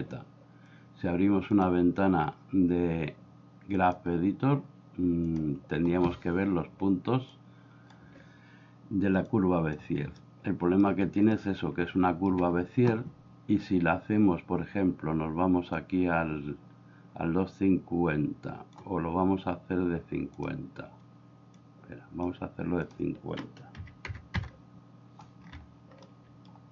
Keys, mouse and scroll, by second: 1.6-4.0 drag, 5.3 click, 7.4 click, 9.4 click, 10.3 ctrl+middle click, 11.4-12.4 shift+middle drag, 15.8-18.7 drag, 20.4 click, 21.6 click, 22.9 click, 26.1 middle click.